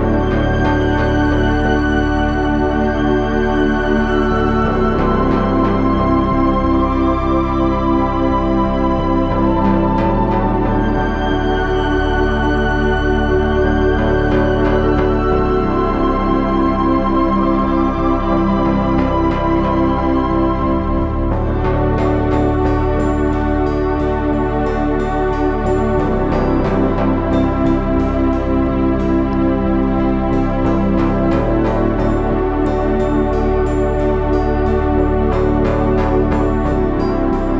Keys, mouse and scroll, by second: 3.7 e, 5.2 s, 6.6 s, 13.7 s, 23.5 r, 25.7-30.5 drag, 33.7-35.1 drag, 36.9-37.5 drag.